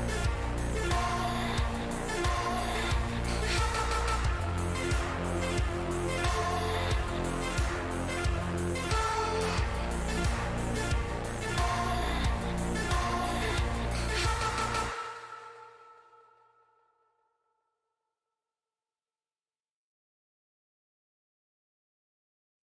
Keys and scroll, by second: 1.6 q, 4.8-5.9 typing, 6.0 Down, 7.1 Return.